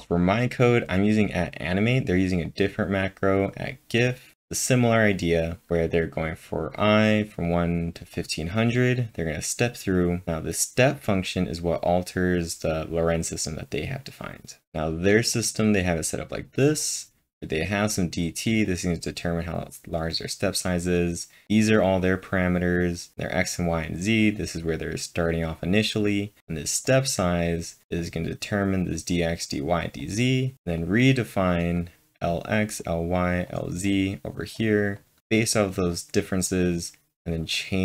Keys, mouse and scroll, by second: 1.7-3.7 drag, 1.7-2.0 scroll up 1, 3.7-6.0 drag, 5.7-6.5 typing, 6.0-7.5 drag, 7.5 click, 8.2-10.2 drag, 10.2-14.7 drag, 14.0 scroll up 1, 14.0-15.9 typing, 15.4-18.7 drag, 15.4-15.7 scroll up 1, 18.7-21.2 drag, 18.7 scroll up 1, 21.3-22.0 typing, 21.4 click, 21.4 scroll up 1, 22.5 double click, 23.1-27.5 drag, 26.1 scroll down 1, 27.5 click, 28.0-30.8 drag, 30.8-32.8 drag, 32.8-33.9 drag, 33.9-35.3 drag, 35.3 click, 35.9 click, 36.7 click.